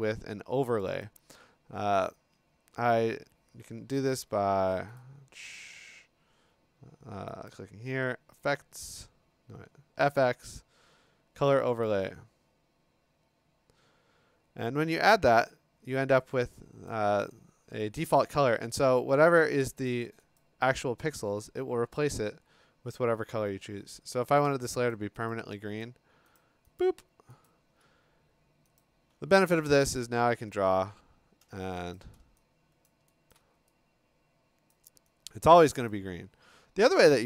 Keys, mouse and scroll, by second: 0.8 click, 1.0 click, 4.1 Escape, 5.0 right click, 6.3 Escape, 7.5 click, 9.3 Escape, 10.2 click, 11.8 click, 16.9 click, 18.0 click, 18.6 Escape, 19.9 click, 20.4 click, 23.0 click, 24.5 click, 24.9 click, 25.3 click, 25.8 click, 26.4 click, 26.8 click, 27.5 click, 28.8 click, 29.1-31.4 ctrl+scroll, 30.3 b, 32.0 click, 32.9 click, 33.3 click, 34.7 click, 35.9-36.3 click.